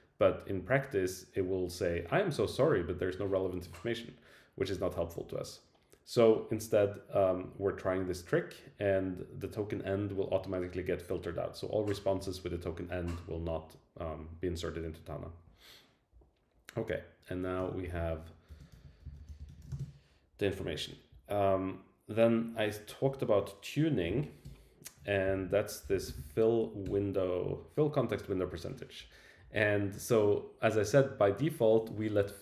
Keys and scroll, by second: 17.8 super+Left, 23.0 Right, 24.1 Left, 24.4 Return, 26.8 Return, 27.4 Right.